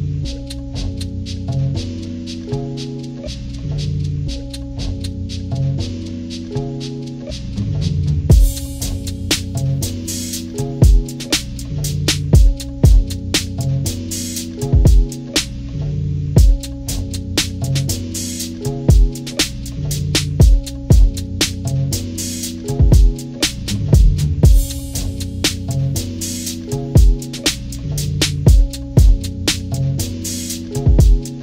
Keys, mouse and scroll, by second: 0.0 scroll up 1, 0.3 click, 0.4 click, 0.5 click, 0.7 click, 0.9 click, 1.2 click, 1.8 click, 2.3 ctrl+-, 2.5 ctrl+=, 2.5 ctrl+scroll down 1, 2.8 click, 3.4 click, 4.0 ctrl+-, 4.4 ctrl+=, 4.4 ctrl+scroll up 2, 4.6 ctrl+scroll down 2, 4.8 click, 4.9 click, 5.0 click, 5.4 click, 6.0 click, 6.7 ctrl+-, 6.9 ctrl+=, 7.1 click, 7.7 ctrl+-, 8.2 ctrl+=, 8.4 scroll down 2, 8.6 ctrl+=, 9.0 click, 9.2 click, 10.2-12.3 drag, 12.3 ctrl+-, 12.5 ctrl+=, 12.7-13.0 scroll up 2, 13.1 click, 13.4 click, 13.9 click, 14.1-16.0 drag, 16.2 ctrl+-, 17.0 ctrl+=, 17.2 ctrl+scroll up 2, 17.5 click, 17.6 click, 17.8 click, 18.5 click, 19.5-21.9 drag, 21.9 ctrl+-, 22.5 ctrl+=, 22.8-24.9 drag, 25.0 ctrl+-, 25.7 scroll up 2, 26.1-29.2 drag, 29.3 ctrl+-, 29.5 ctrl+=, 29.7 click, 30.1 ctrl+-, 30.3 ctrl+scroll up 2, 30.6-31.4 drag.